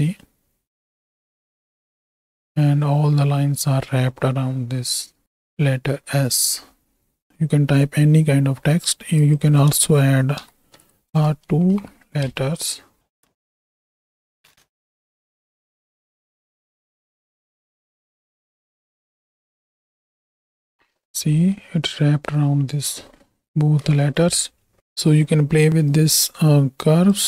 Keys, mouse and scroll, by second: 7.3 KP_7, 9.3-11.1 drag, 11.6 shift+Right, 11.8 shift+Left, 12.2 space, 20.9 shift+Right, 20.9 space, 25.0-26.1 drag, 26.6 click.